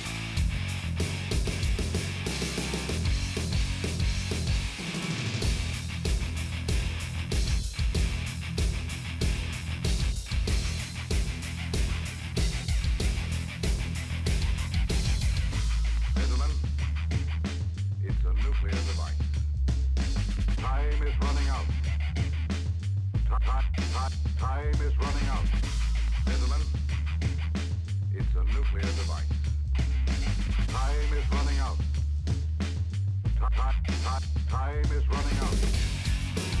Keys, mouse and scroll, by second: 1.1 right click, 1.4 click, 2.3 shift+click, 2.7 right click, 3.0-4.4 drag, 4.4 right click, 5.2-6.7 drag, 6.7 middle click, 7.1 click, 7.3-8.9 shift+middle drag, 8.9 shift+click, 9.1 middle click, 10.0 middle click, 10.2 KP_7, 10.5 KP_1, 11.0 middle click, 11.4 click, 11.5 scroll up 4, 11.7 middle click, 12.2 shift+middle click, 12.6-13.0 scroll down 2, 13.0 shift+middle click, 13.4 f, 14.0 ctrl+z, 14.3 shift+click, 14.5 right click, 15.0-16.7 drag, 16.7 f, 16.9 shift+click, 17.6 middle click, 18.0 f, 18.3 click, 18.5 shift+click, 18.8 middle click, 19.1 f, 19.2 shift+click, 19.8 f, 19.9-22.0 middle drag, 22.1-23.3 ctrl+z, 23.5 shift+click, 23.9-30.9 typing, 24.1 shift+click, 24.8 click, 24.9 middle click, 25.2 shift+click, 25.8 shift+click, 26.4 shift+click, 27.1 shift+click, 27.6 middle click, 27.9 shift+click, 28.5 shift+click, 28.9 shift+click, 29.5 shift+click, 30.1 shift+click, 30.6 shift+click, 31.0 middle click, 31.7 scroll down 4, 31.9 middle click, 32.9 ctrl+s, 33.3 middle click, 34.1 shift+click, 34.7 shift+click, 35.2-36.6 middle drag.